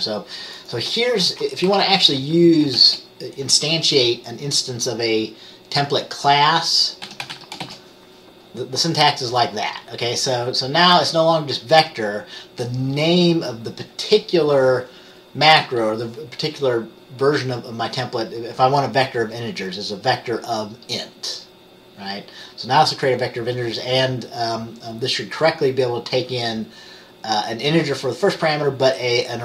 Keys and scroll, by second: 1.8 Right, 2.9 shift+,, 7.2-7.7 typing.